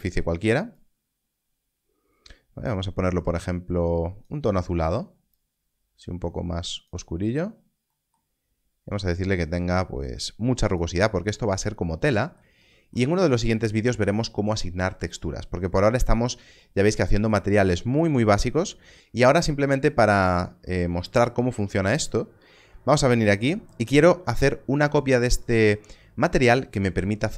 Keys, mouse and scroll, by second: 9.1 click, 15.4 scroll up 1, 19.4 click.